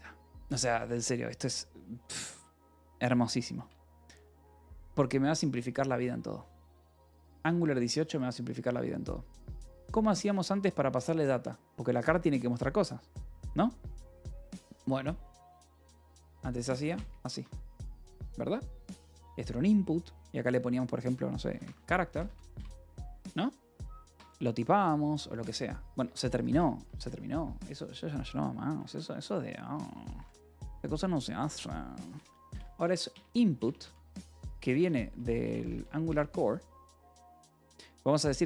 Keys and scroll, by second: 1.9 c, 2.3 d, 3.5 Return, 4.7 alt+Tab, 5.1 j, 6.6 alt+Tab, 7.4-8.5 typing, 9.9 a, 16.1-18.4 typing, 21.3-24.2 typing, 25.9 Escape, 25.9-27.3 typing, 28.6-30.9 typing, 32.0-36.0 typing, 38.0-38.4 typing.